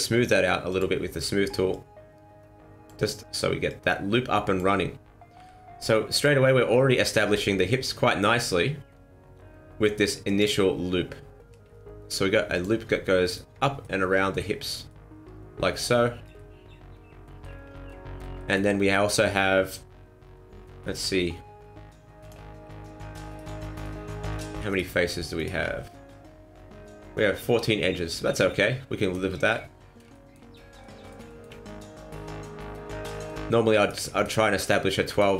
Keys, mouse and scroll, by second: 0.7 click, 1.7 click, 3.6 click, 5.3 r, 7.3 g, 12.5 click, 13.2 alt+right click, 13.7 scroll down 1, 13.8 middle click, 14.8 middle click, 15.9-16.3 scroll down 6, 16.3 middle click, 17.6 scroll up 3, 17.8 middle click, 18.3 middle click, 20.8 middle click, 22.2 click, 22.6-23.1 scroll up 2, 23.3 alt+right click, 23.7 alt+shift+right click, 24.7 alt+shift+right click, 25.4 alt+right click, 27.7 middle click, 29.5-30.1 scroll down 3, 30.1 shift+middle click, 30.5 scroll up 2, 30.8 middle click, 31.2 shift+middle click, 33.1 middle click, 33.7 right click, 34.1 shift+right click, 34.5 right click, 35.1 shift+right click.